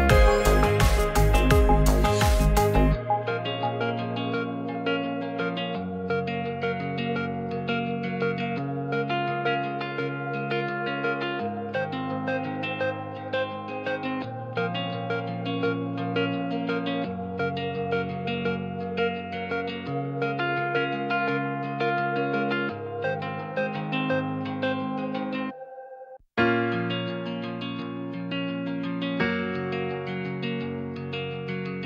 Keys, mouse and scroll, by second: 0.4 middle click, 1.1 click, 2.0 g, 2.1 z, 3.2 middle click, 3.6 ctrl+a, 4.2 Tab, 5.2 right click, 7.0-8.1 drag, 9.6 middle click, 10.8 Tab, 11.2 Tab, 12.6 alt+click, 14.0-15.4 drag, 16.1 a, 16.4 e, 17.0-23.2 drag, 23.5-26.5 drag, 28.2 click, 30.8 s.